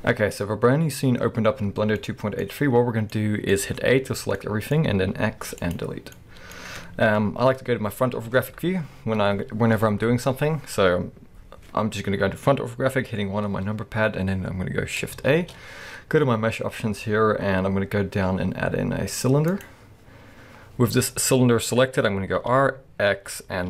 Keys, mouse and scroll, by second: 2.0-3.7 middle drag, 2.5-3.2 scroll down 2, 3.9 a, 4.3-13.0 middle drag, 5.2 x, 8.2 KP_1, 8.9-11.4 scroll up 2, 11.4-13.0 scroll up 1, 15.3 shift+a, 20.0-22.1 scroll up 1, 22.4 r.